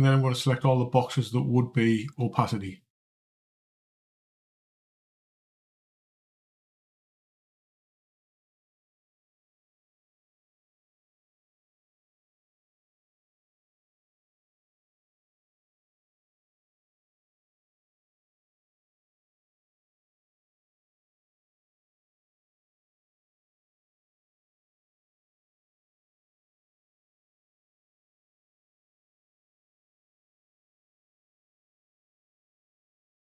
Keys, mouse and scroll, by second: 1.9 click, 3.6 c, 30.4 click.